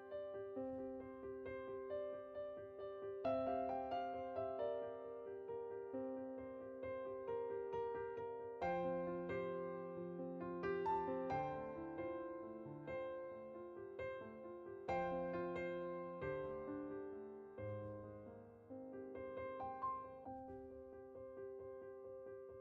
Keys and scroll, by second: 18.6-20.2 typing.